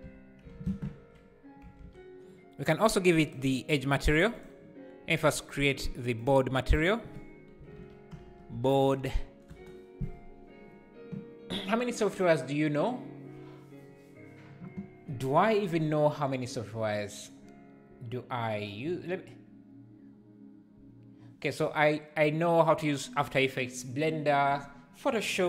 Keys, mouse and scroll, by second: 0.0 z, 3.3-9.5 drag, 9.5 BackSpace.